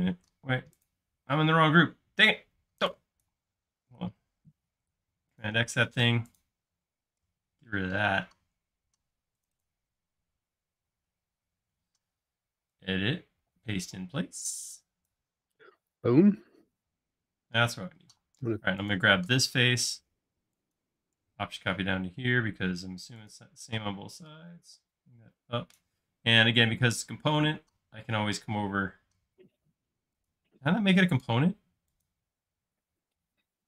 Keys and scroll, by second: 4.8 super+x, 7.3 BackSpace, 18.1-19.3 typing, 23.7 p, 26.2 space.